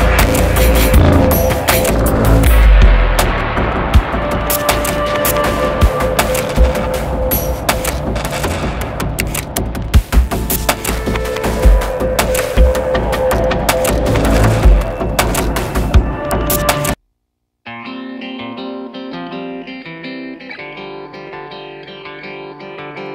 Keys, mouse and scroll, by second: 5.4 double click, 6.6 ctrl+z, 7.2 ctrl+z, 12.3 right click, 14.5 double click, 21.0 double click.